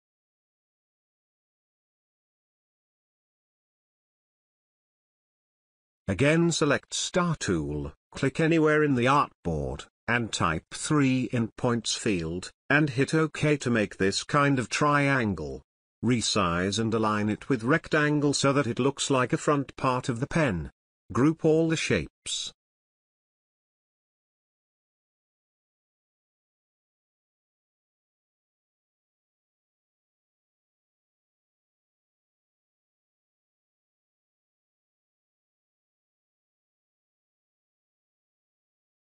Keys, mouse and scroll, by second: 0.1 space, 0.4 space, 0.5 ctrl+alt+click, 0.8-1.1 drag, 2.6-3.2 ctrl+alt+drag, 4.9 space, 5.0 click, 5.1 ctrl+alt+click, 5.3-5.7 drag, 13.0 Return, 14.3 click, 16.5-18.7 drag, 21.8 click, 22.9 space, 23.2 ctrl+click, 23.9 click, 25.3-26.4 alt+shift+drag, 28.5 space, 28.8 ctrl+click, 30.7 ctrl+click, 32.0-34.2 drag, 34.8 Right, 35.5 Left, 36.5 Right, 36.6 click, 37.0 space, 37.2 ctrl+click, 38.2-39.0 drag.